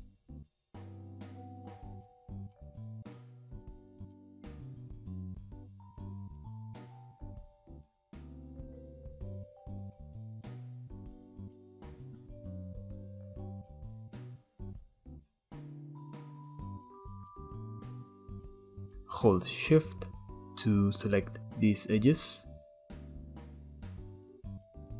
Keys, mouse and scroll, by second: 0.5 KP_7, 1.4-2.5 scroll up 1, 2.5 k, 7.3-8.5 shift+middle drag, 13.3 shift+middle click, 13.5 scroll down 2, 13.6-14.8 shift+middle drag, 15.0 k, 18.4 ctrl+z, 18.6-19.4 drag, 20.2 shift+drag, 20.4 shift+click, 21.1 shift+drag, 21.5 shift+drag, 21.8 shift+click, 22.2-22.6 shift+middle drag, 22.6 scroll up 2, 22.7-24.9 middle drag.